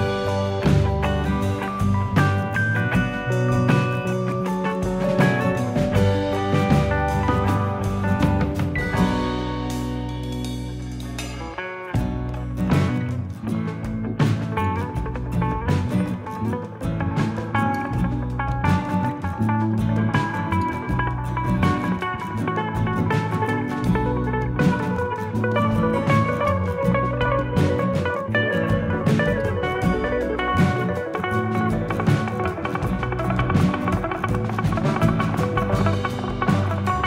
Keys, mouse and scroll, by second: 0.3 middle click, 0.9 middle click, 2.2 click, 3.2 middle click, 4.4-4.8 scroll down 2, 4.6 middle click, 6.7 click, 7.2 g, 9.4 click, 10.8 click, 11.5 middle click, 12.2 click, 13.0 g, 14.1 g, 14.5 click, 14.9 g, 16.1 middle click, 16.7 click, 17.3 g, 18.5 middle click, 19.1 click, 19.5 g, 21.0 click, 21.3 g, 22.3 middle click, 22.9 middle click, 24.0 middle click, 24.8 click, 25.3 g, 26.7 middle click, 27.4 click, 27.7 g, 28.9 middle click, 31.1 click, 31.4 middle click, 32.0 click, 33.3 click, 34.4 click, 35.2 middle click, 35.5-35.8 scroll up 2, 35.8 middle click, 36.8 click.